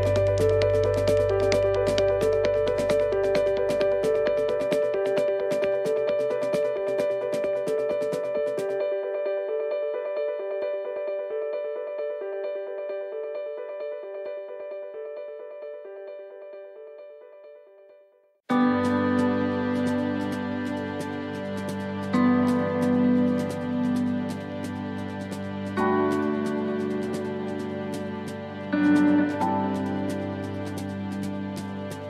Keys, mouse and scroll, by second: 0.9 click, 2.8 click, 4.5-5.8 scroll up 17, 6.1 click, 8.9 middle click, 10.2 click, 12.3 middle click, 12.8 scroll up 4, 13.4 shift+middle click, 13.9 middle click, 14.5 click, 16.6 middle click, 17.2 shift+middle click, 17.9 click, 19.8 click, 22.4 s, 25.2 click, 27.1 middle click, 29.0 middle click, 30.7 click, 31.8 middle click.